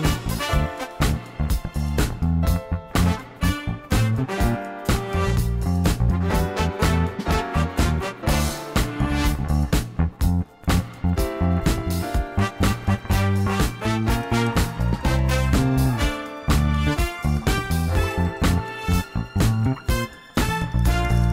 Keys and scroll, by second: 5.3 shift+z, 6.9 Tab, 8.9 2, 13.1 e, 17.4 g.